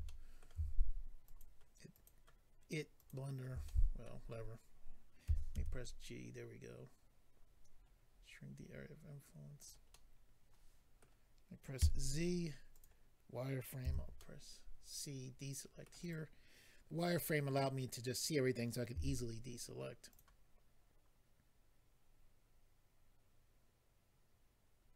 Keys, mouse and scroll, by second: 0.0 middle click, 1.2 alt+click, 2.9 alt+click, 3.6 middle click, 5.3 g, 6.8 typing, 7.7-8.2 scroll up 4, 9.6 click, 9.7 click, 9.9 middle click, 11.7 z, 12.7 click, 12.8 click, 13.8 c, 14.1 middle click, 16.0 right click, 20.1 click, 20.1 z.